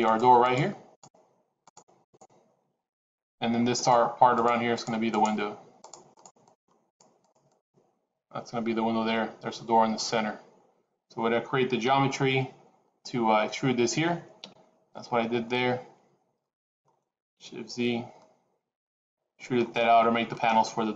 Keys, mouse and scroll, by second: 0.4 click, 1.2 shift+click, 1.7 click, 2.1 shift+click, 3.6 click, 4.3 shift+click, 4.7 shift+click, 5.1 click, 6.7 shift+click, 7.1 shift+click, 7.3 shift+click.